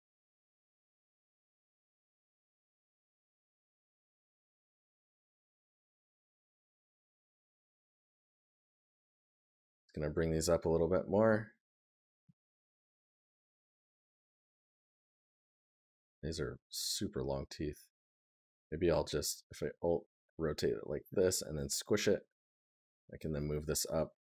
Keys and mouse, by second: 1.4 right click, 5.1 right click, 8.8 right click, 11.2 right click.